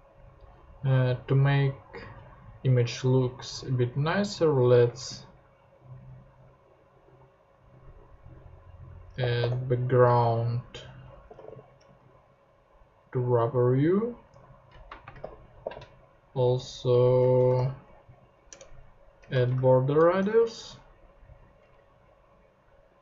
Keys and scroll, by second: 4.7 space, 9.0-12.0 typing, 14.3 super+Tab, 15.0 super+space, 15.2 b, 15.6 g, 17.4 BackSpace, 17.5 r, 18.5 Return, 19.3 BackSpace, 20.2 super+Tab.